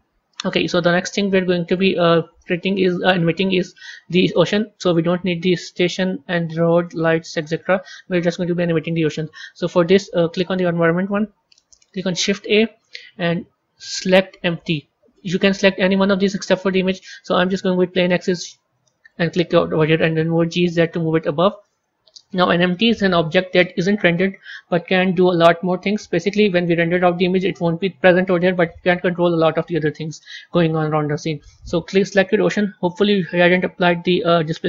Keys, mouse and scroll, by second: 0.6-1.5 scroll down 3, 1.5-2.0 scroll up 2, 2.0-5.0 middle drag, 5.5 click, 5.9 click, 6.6 click, 7.2 click, 10.4 click, 12.0 shift+a, 20.1 g, 32.1 click, 33.3 click.